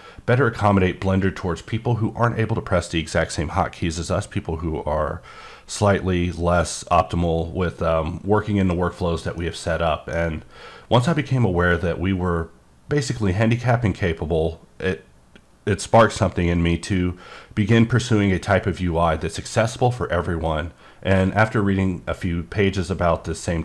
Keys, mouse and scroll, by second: 9.4 middle click.